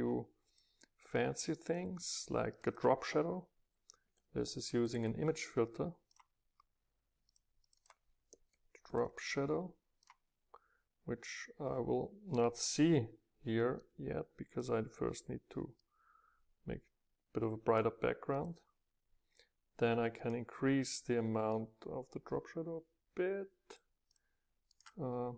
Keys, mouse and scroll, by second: 0.0-4.7 drag, 0.0 scroll up 2, 6.2-9.9 drag, 10.0-12.1 drag, 13.9-15.8 drag, 15.8 middle click, 18.4-21.6 drag, 22.2 middle click, 22.4 middle click, 22.6 middle click, 22.9-24.1 middle drag, 24.1-24.7 drag, 24.7-25.3 middle drag.